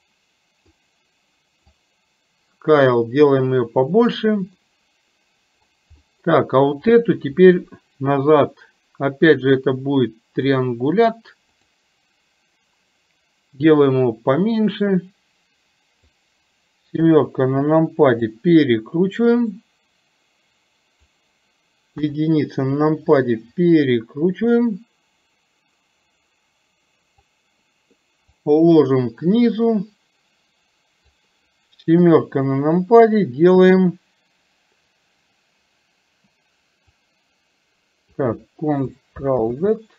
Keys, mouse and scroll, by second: 1.8-4.1 drag, 4.7-5.4 scroll up 1, 5.4-5.8 scroll up 1, 6.0 scroll up 1, 7.0 click, 9.5-10.8 drag, 11.6 click, 13.9-16.1 drag, 17.1 KP_7, 18.5-21.1 drag, 22.0 KP_1, 24.0-27.4 drag, 28.6-31.3 drag, 32.1 KP_7, 37.4 click.